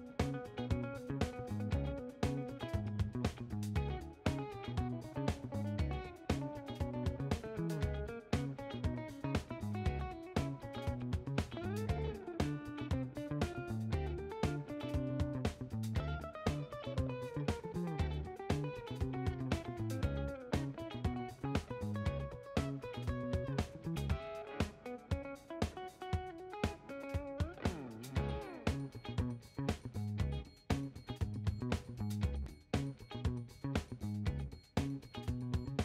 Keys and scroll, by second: 10.9 5, 11.1 Return, 12.6-17.1 typing, 14.0 Left, 18.4-19.2 typing, 30.0-33.5 typing, 33.8 Return.